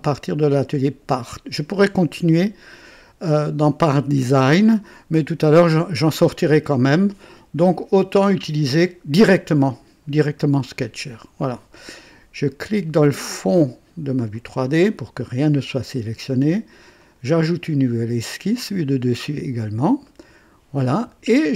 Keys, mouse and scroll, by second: 7.8 click, 10.2 click, 14.3 click, 17.0 click, 19.1 click, 20.0-20.8 right drag.